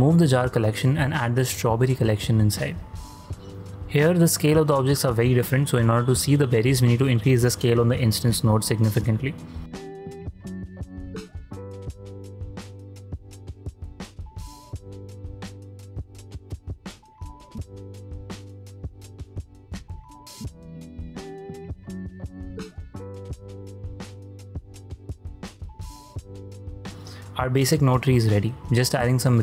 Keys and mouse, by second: 0.6-1.9 drag, 2.7 z, 3.1-3.6 middle drag, 3.9 shift+middle drag, 4.4 ctrl+middle drag, 4.9 ctrl+middle click, 5.3 shift+drag, 5.9 shift+click, 6.3 drag, 6.7 ctrl+click, 7.1-7.4 shift+drag, 7.5 shift+space, 8.1 shift+space, 9.4 shift+space, 10.0 click, 10.6 ctrl+h, 11.1 click, 11.8 click, 13.4 click, 13.6 middle click, 14.1-14.5 shift+middle drag, 15.6-18.0 drag, 18.4 ctrl+click, 18.8 z, 19.2 z, 19.6 ctrl+drag, 20.3 ctrl+drag, 20.6 shift+drag, 20.9 shift+space, 21.6 shift+space, 21.7 shift+click, 22.4 shift+space, 25.3 click, 25.8 right click, 26.4 shift+space, 26.8 shift+space, 27.4 ctrl+click, 27.8 shift+click, 28.2 ctrl+click, 28.6 ctrl+click, 29.0 shift+click.